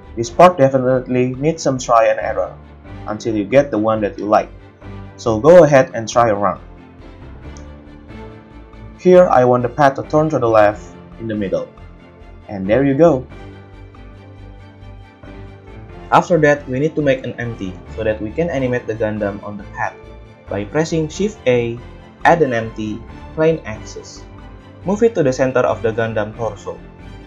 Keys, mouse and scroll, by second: 0.2-3.6 typing, 1.7 click, 2.4 drag, 2.6-3.5 middle drag, 3.5 drag, 3.6-5.0 middle drag, 5.5 KP_3, 5.8 g, 6.3 right click, 7.0-12.5 typing, 7.9 click, 8.2 middle click, 8.9 click, 8.9 shift+middle click, 9.5 click, 9.7-10.9 middle drag, 10.9 click, 11.2-15.6 middle drag, 14.2 Tab, 19.8 click, 20.7 shift+a, 24.5-27.2 shift+middle drag, 24.5 shift+KP_1, 25.0 g.